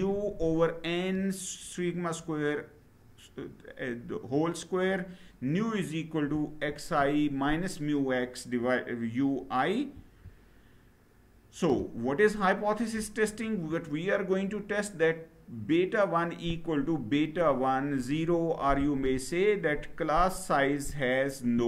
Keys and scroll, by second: 9.6 Down.